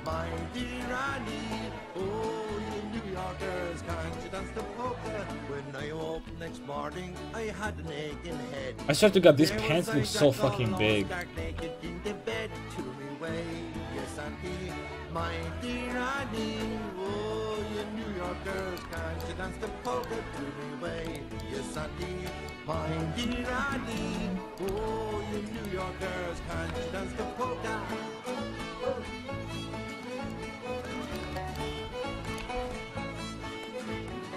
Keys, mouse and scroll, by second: 1.2 Tab, 6.2 KP_5, 10.7-14.6 right drag, 11.1 middle click, 11.4 s, 15.6-17.5 right drag, 16.5 s, 18.2 click, 18.3 a, 21.0 Tab, 21.1 right click, 23.3-24.8 typing, 25.7-27.1 right drag, 26.2 s, 30.3-32.4 drag, 30.5 a, 31.7 a, 31.9 c, 32.4-34.3 right drag, 32.4 a, 32.6 c.